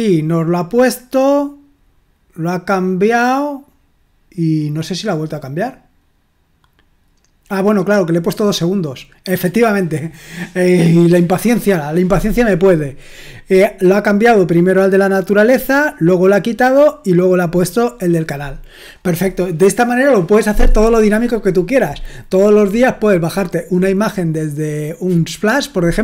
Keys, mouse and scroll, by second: 1.4-26.0 scroll down 1.